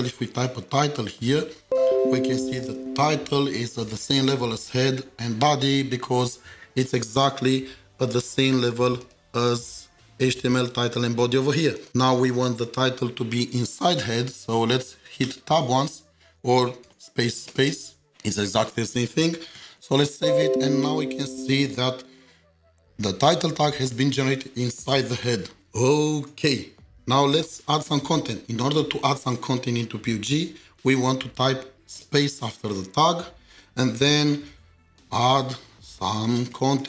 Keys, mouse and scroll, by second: 0.0-1.1 typing, 9.7 typing, 9.8 double click, 13.6 double click, 15.2 Tab, 16.9 BackSpace, 17.5 space, 17.7 space, 19.6 ctrl+s, 32.0 ctrl+s, 33.6 space, 34.9-36.8 typing.